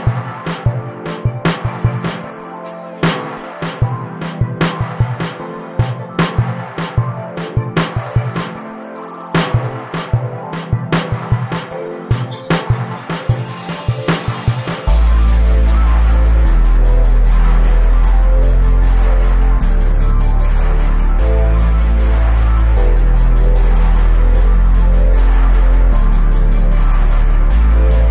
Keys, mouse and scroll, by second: 1.1-2.9 drag, 3.0-3.9 middle drag, 3.9 shift+a, 5.2 ctrl+alt+KP_0, 5.7 f, 5.9 w, 6.7 Delete, 7.5 KP_0, 8.1 shift+f, 12.5-13.0 right drag, 13.0 r, 17.0 g, 18.1-19.6 right drag, 22.6-23.7 right drag, 23.7 z, 24.5 right click, 25.4 drag, 26.4-27.9 drag, 28.0 click.